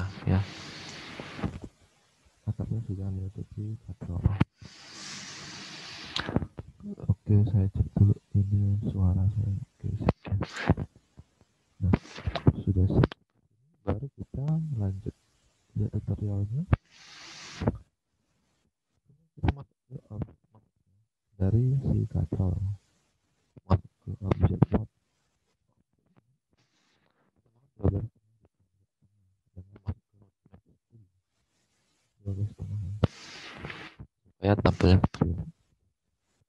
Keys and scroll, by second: 14.5 alt+Tab, 20.9 alt+Tab, 26.3 alt+Tab.